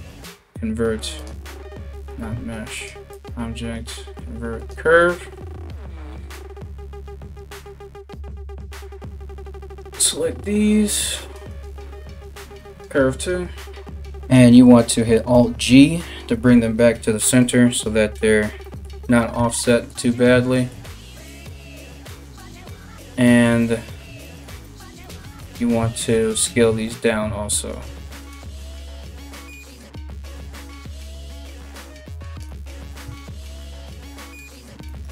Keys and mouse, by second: 1.7 ctrl+z, 9.4 middle click, 9.4 right click, 13.7 g, 15.0 alt+g, 25.0 Tab, 27.4 s, 29.2-30.3 middle drag, 30.3-35.1 shift+drag, 34.7 Tab.